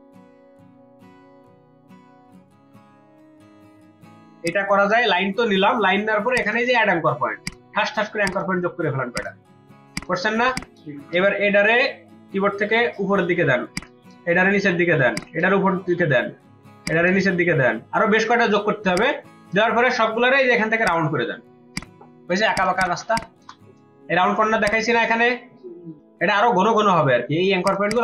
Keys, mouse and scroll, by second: 1.9 double click, 2.9 v, 11.1 a, 22.5 ctrl+alt+click, 22.7 ctrl+alt+double click, 25.9 space, 27.6 ctrl+click, 27.8 ctrl+double click, 27.9 ctrl+space.